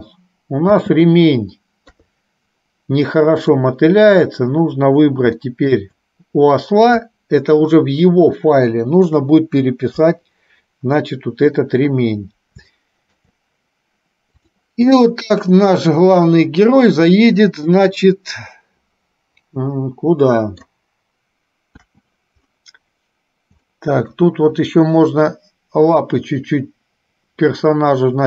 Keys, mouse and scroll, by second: 0.8 space, 2.0 KP_3, 3.5 click, 5.6 shift+middle click, 10.0 KP_3, 12.8 shift+middle click, 14.5 click, 15.1 middle click, 16.5 click, 17.5-20.8 middle drag, 21.8 KP_1, 23.8 shift+middle click.